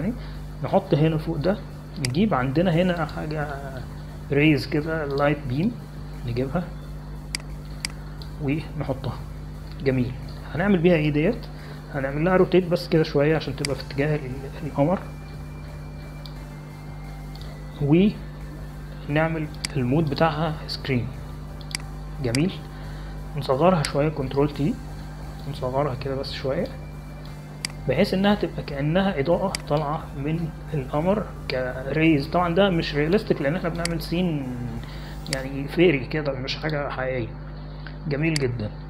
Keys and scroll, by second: 25.6 ctrl+t.